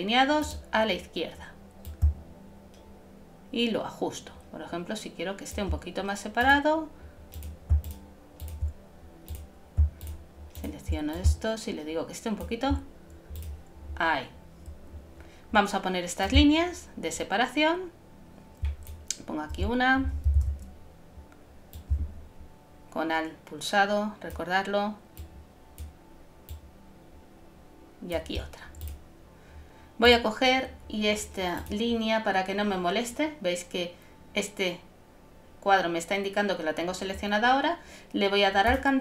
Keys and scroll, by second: 20.4 shift+super+z.